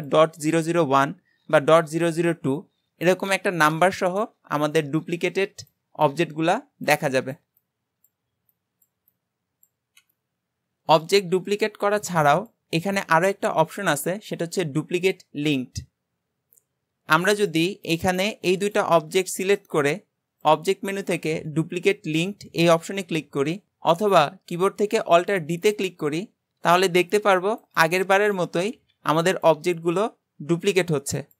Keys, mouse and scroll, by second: 10.9 click, 12.3-15.5 drag, 17.9 click, 18.7 shift+click, 19.0-19.3 scroll down 2, 19.3-20.5 shift+middle drag, 20.5-23.6 drag, 28.2 shift+middle click, 28.7 alt+d, 29.7-30.6 scroll down 4, 30.6 alt+d.